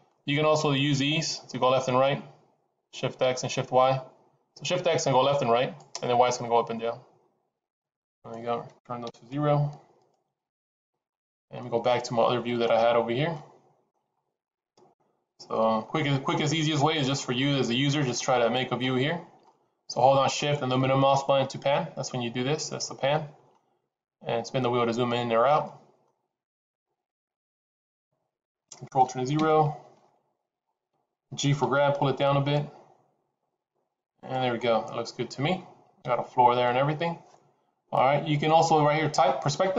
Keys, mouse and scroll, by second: 1.0 click, 6.2 click, 8.0 click, 9.8 click, 11.1-11.4 scroll down 4, 11.4 middle click, 12.3-12.8 scroll down 7, 13.2 shift+middle click, 14.0-14.4 scroll up 2, 14.4 middle click, 15.8-16.3 scroll up 1, 16.7 shift+middle click, 17.4 middle click, 18.1 shift+middle click, 19.6 shift+middle click, 20.8 shift+middle click, 24.3-24.8 scroll up 2, 24.8-25.6 scroll down 3, 25.6 middle click, 26.1-26.7 scroll up 1, 26.8 shift+middle click, 28.0 middle click, 29.4 ctrl+alt+KP_0, 30.5-31.0 scroll up 3, 31.6 g, 34.5-35.0 scroll up 3, 35.0 scroll down 2.